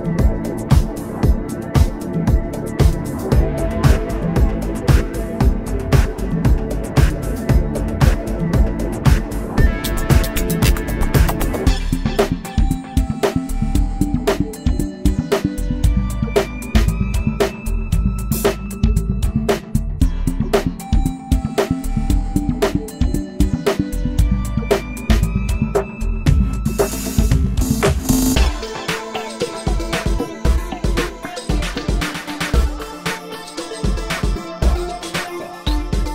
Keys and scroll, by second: 21.2 space, 22.1 space.